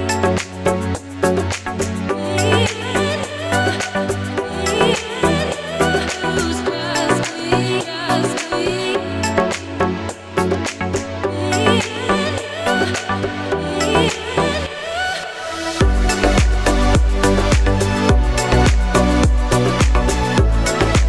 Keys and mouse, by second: 3.7 z, 4.5 click, 6.6 g, 7.5 shift+d, 8.2-12.5 drag, 8.7 z, 9.5 KP_1, 10.9 r, 12.4-18.7 ctrl+middle drag, 13.3 r, 15.8 g, 17.7-19.4 drag, 18.7 s, 19.4-21.0 middle drag, 20.1 s.